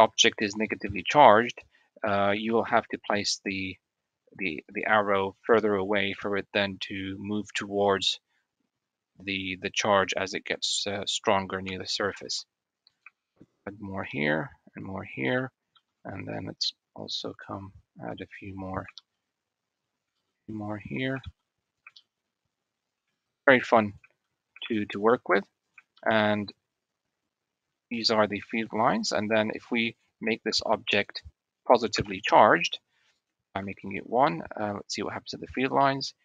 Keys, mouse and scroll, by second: 0.7 shift+middle click, 0.9 shift+click, 2.6 shift+d, 10.4 shift+middle drag, 12.2 shift+d, 13.1 shift+d, 14.3 shift+d, 15.5 shift+d, 18.7 shift+d, 20.1 shift+d, 21.0 shift+d, 21.9 shift+d, 23.0 shift+d, 24.6 shift+d, 26.0 shift+d, 28.3 shift+middle click, 29.7 click, 30.3 Tab, 31.6 l, 32.9-34.8 drag, 35.4 click.